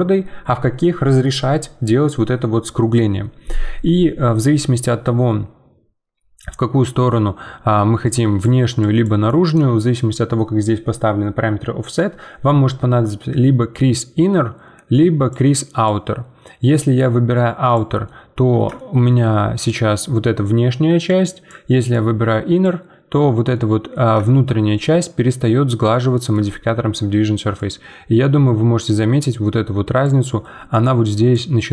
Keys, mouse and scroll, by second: 6.1 scroll down 1, 6.4-7.9 middle drag, 7.9-9.6 typing, 8.0 click, 8.8 click, 9.2 right click, 13.7-18.0 drag, 18.0-21.1 middle drag, 21.1-23.5 drag, 23.5-24.6 middle drag, 24.6 scroll down 2, 24.9-27.5 middle drag, 27.5-30.5 drag, 30.5 d, 30.7 click, 31.3 d.